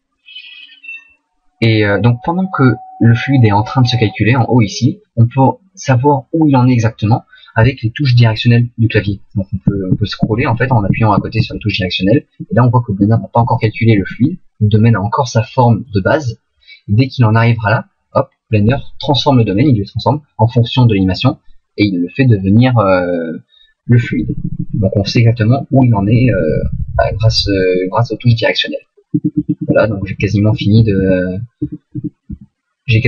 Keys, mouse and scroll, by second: 8.9 Right, 9.6 Right, 9.9 Right, 10.2 Right, 10.4 Right, 10.6 Right, 10.9 Right, 11.1 Right, 11.4 Right, 12.4 Left, 13.0 Right, 13.4 Left, 13.6 Left, 14.0 Right, 14.2 Right, 24.0 Left, 24.2 Left, 24.4 Left, 24.5 Left, 24.7 Left, 25.0 Left, 25.2 Left, 25.4 Left, 25.7 Left, 25.9 Right, 26.1 Right, 26.3 Right, 26.5 Right, 26.6 Right, 26.8 Right, 27.0 Right, 27.1 Right, 27.2 Right, 27.4 Right, 27.6 Right, 27.8 Right, 28.0 Right, 28.1 Right, 28.3 Right, 28.4 Right, 28.6 Right, 29.1 Left, 29.4 Left, 29.6 Left, 29.8 Right, 30.0 Right, 30.2 Right, 30.5 Left, 30.8 Right, 31.0 Right, 31.6 Left, 32.0 Left, 32.3 Right, 32.8 Right.